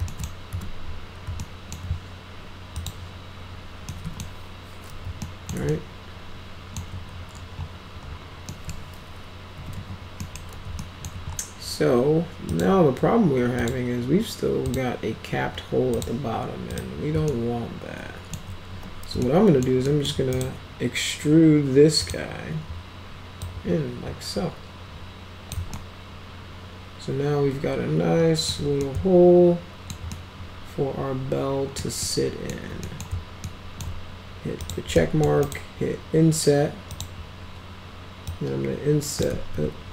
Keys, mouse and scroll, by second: 0.0 alt+middle click, 0.4 z, 1.3-1.7 alt+middle drag, 2.7 click, 3.8 middle drag, 5.1 alt+middle click, 5.6-6.7 alt+middle drag, 8.4 middle click, 9.2-10.2 typing, 10.1 middle click, 10.7 alt+middle click, 12.4 click, 13.5 click, 14.6 click, 15.9 click, 16.7 click, 17.2-18.2 alt+middle drag, 18.6 w, 19.1 alt+middle click, 19.8 alt+middle click, 20.3 right click, 21.9 click, 23.4-25.4 drag, 25.7-28.4 alt+middle drag, 28.7-29.8 alt+middle drag, 30.1-31.7 alt+middle drag, 31.9 alt+middle click, 32.8 middle click, 33.4 alt+middle click, 34.5 click, 34.9 alt+middle click, 35.4 right click, 36.9 click, 38.2 click, 39.2 ctrl+z.